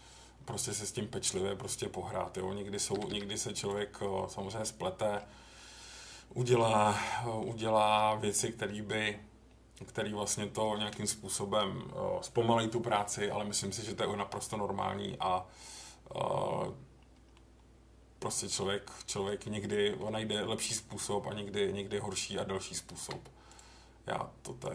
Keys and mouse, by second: 0.4 middle click, 1.2 click, 2.9 g, 3.1 g, 3.6 click, 4.1-5.1 middle drag, 5.5-6.5 middle drag, 6.9 middle click, 17.3-18.5 middle drag, 19.1 middle click, 20.4 middle click, 22.9 k.